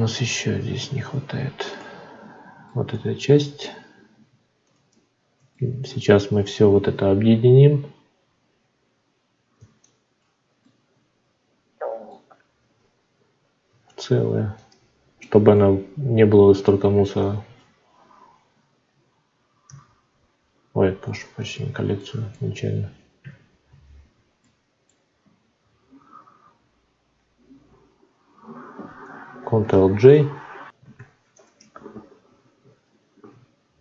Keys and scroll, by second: 19.6 ctrl+g, 23.7 ctrl+z, 29.6 ctrl+j, 30.9 F9.